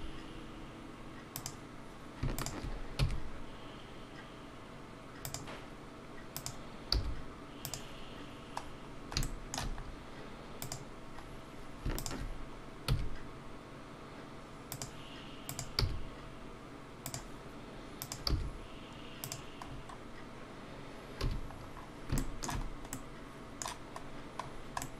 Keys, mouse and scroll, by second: 1.3 g, 2.4 shift+click, 5.2 e, 6.4 click, 7.7 g, 8.7 scroll down 2, 9.2 shift+middle click, 9.4 shift+g, 9.8 scroll, 14.7 e, 15.5 click, 17.0 g, 18.0 click, 19.2 g, 19.6 scroll down 4, 21.2 a, 21.5 scroll down 6, 22.2 shift+middle click, 22.9 middle click, 24.1 scroll down 1, 24.8 middle click.